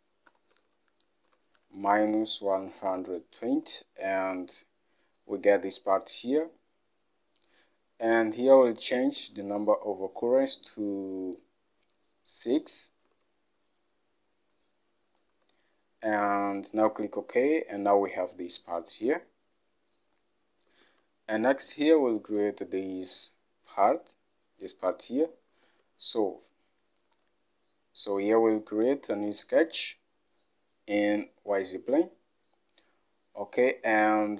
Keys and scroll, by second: 0.4-3.0 typing, 9.3 alt+Tab, 11.0 Up, 13.1 alt+Tab, 15.4 6, 20.9 alt+Tab, 27.2 Home, 32.2 Home.